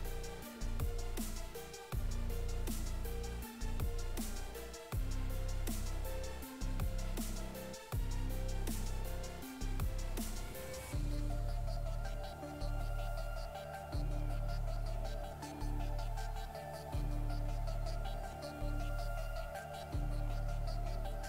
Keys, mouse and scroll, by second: 0.4 right click, 6.1 right click, 7.5 right click, 9.0 right click, 12.2 right click, 14.2 right click, 15.1 right click, 15.8 right click, 19.3 click, 20.0 right click.